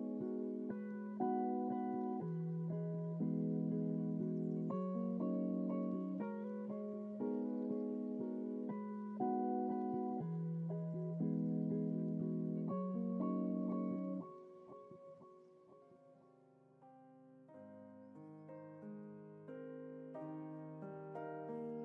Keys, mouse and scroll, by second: 1.8 ctrl+t, 19.3-21.2 drag.